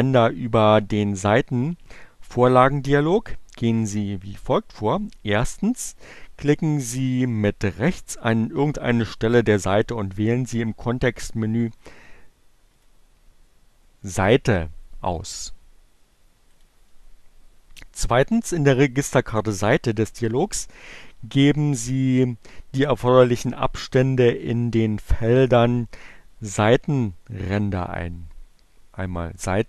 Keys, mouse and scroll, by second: 11.4 right click, 15.9 click.